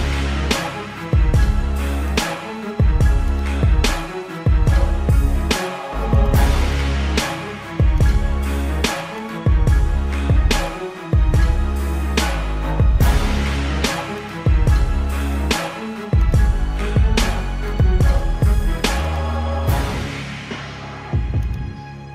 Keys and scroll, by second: 1.2 ctrl+alt+z, 1.8 ctrl+alt+z, 8.8 space, 11.1 ], 17.5 ctrl+-, 18.8 space.